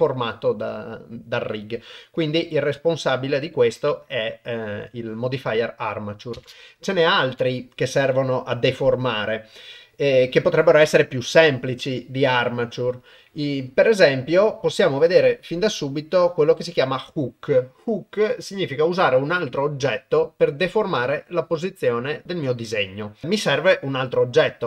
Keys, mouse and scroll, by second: 6.4 shift+space, 7.2 shift+Left, 13.3-14.9 drag, 16.1-23.2 drag.